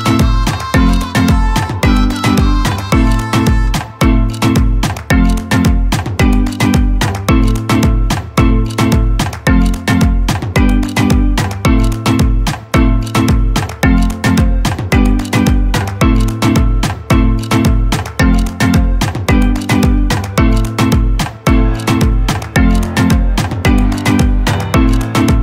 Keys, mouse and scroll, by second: 2.2-5.1 drag, 5.1 ctrl+space, 7.2-11.1 shift+drag, 14.1 Up, 15.0 click, 16.3-17.1 alt+scroll down 1, 17.6 ctrl+space, 17.6 ctrl+click, 18.2 ctrl+space, 19.3-23.0 drag, 23.0-25.4 drag.